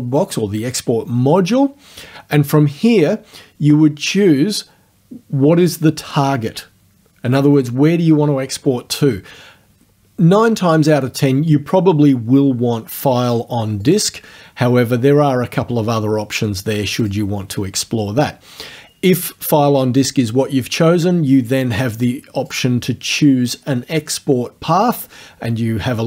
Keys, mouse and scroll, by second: 13.9 click, 17.1 click, 21.7 click.